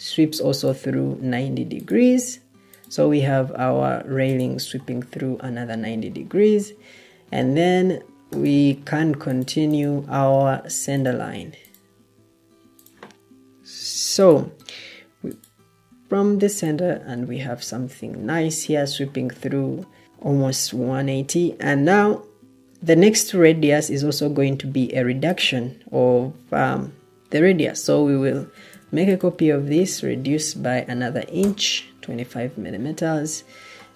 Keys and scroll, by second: 28.2 ctrl+d, 29.6 shift+Tab, 30.6-31.0 typing, 31.3 Return.